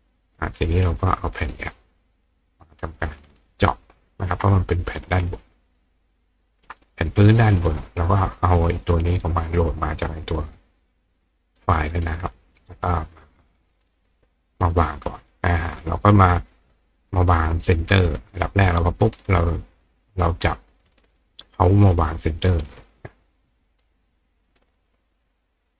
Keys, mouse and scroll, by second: 0.3 click, 1.1 click, 2.4-3.6 drag, 4.5 click, 5.2-6.4 ctrl+drag, 8.3-9.2 drag, 9.9-11.7 drag, 11.6 right click, 12.9 click, 13.6 click, 15.3 click, 15.9 click, 17.4-19.1 drag, 19.8-21.9 drag, 22.3 click, 23.0 click, 23.7 right click, 24.6 click.